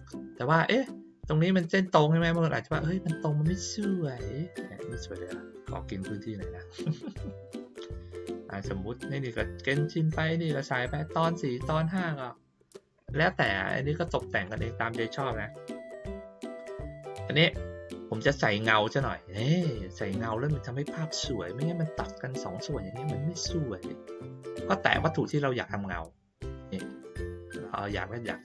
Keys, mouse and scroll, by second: 4.1-6.0 drag, 7.1 click, 8.6-9.3 drag, 9.9 click, 12.1-13.4 drag, 14.4-16.5 drag, 16.9 click, 19.5 middle click, 21.9 click, 23.0-23.6 ctrl+scroll up 1, 24.2 click, 25.2-26.0 ctrl+scroll down 1, 26.0-26.3 ctrl+scroll up 1, 26.3-27.2 ctrl+middle drag.